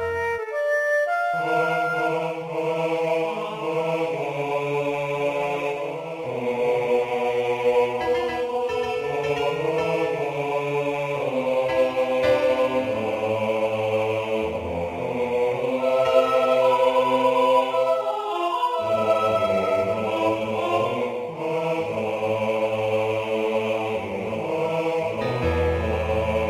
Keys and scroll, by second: 0.0-1.7 typing, 6.9-7.8 typing, 10.3 ctrl+z, 11.9 ctrl+z, 15.8 space, 17.0-19.5 typing, 19.8 ctrl+h.